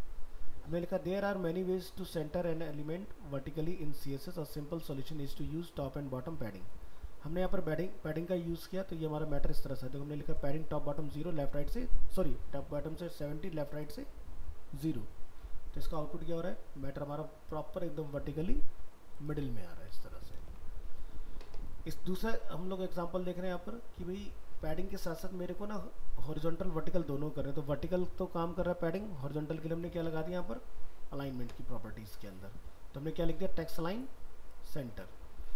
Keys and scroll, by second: 20.4 ctrl+w, 34.9 alt+Tab.